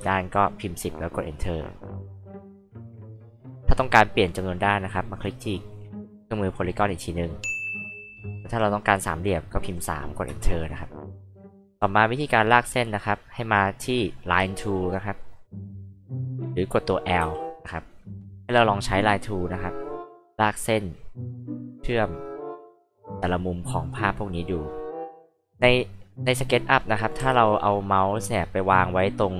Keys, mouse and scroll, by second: 1.3 alt+click, 2.1 alt+click, 4.3 alt+click, 7.4 alt+click, 11.5 alt+click, 14.0 alt+click, 17.2 alt+l, 18.0 scroll up 2, 18.5 scroll up 2, 19.1 alt+click, 20.3 alt+click, 21.2 alt+click, 22.3 alt+click, 23.0 alt+click, 24.0 alt+click, 25.6-26.1 alt+drag, 27.2 alt+l.